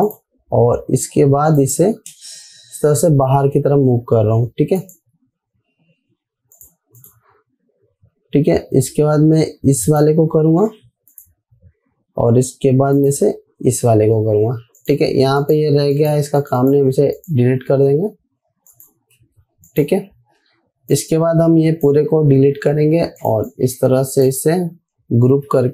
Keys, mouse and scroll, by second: 0.6 click, 3.2 Right, 5.2 click, 5.8 Right, 7.0 click, 10.3 click, 11.0 Right, 11.6 click, 13.9 Right, 15.2 click, 18.5 Delete, 19.1 click, 19.6 Escape, 20.1-22.6 drag, 23.0 Delete, 23.6-24.9 drag.